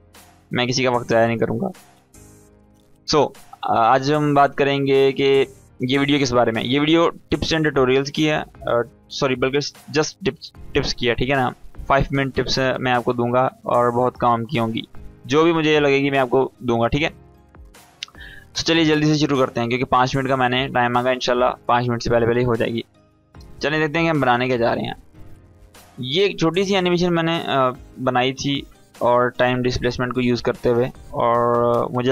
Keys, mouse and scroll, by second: 18.7-22.2 drag, 24.0 space, 26.0 space.